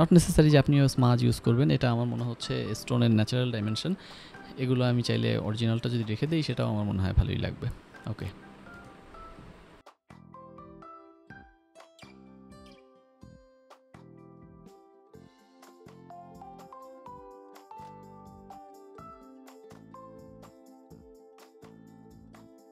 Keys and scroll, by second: 0.3 ctrl+s, 6.9 [, 9.3 ctrl+s, 12.7 ctrl+s, 13.1-14.4 typing, 15.4 ctrl+z, 15.5 [, 16.3 ctrl+s, 17.0 ctrl+s, 17.9 [.